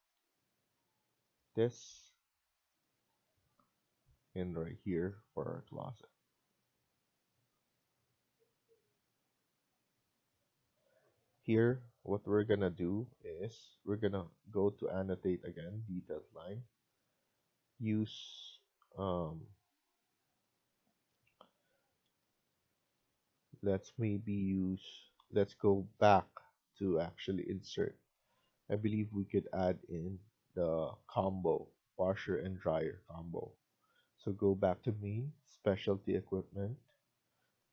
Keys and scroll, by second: 0.0 Escape, 2.8 Escape, 6.6 Escape, 9.0 Escape, 12.0 Escape, 22.6 Escape, 22.8 Escape.